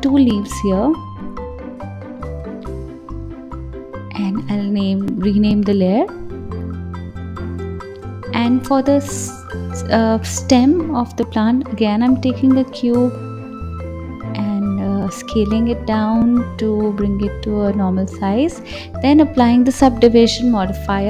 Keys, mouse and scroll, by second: 1.6 KP_1, 3.6 click, 3.8-6.8 drag, 7.0 click, 7.8 shift+a, 9.7-10.4 scroll down 2, 10.4 click, 11.7 KP_7, 12.9 click, 14.1 KP_1, 15.1 s, 15.9 g, 17.6-21.0 drag.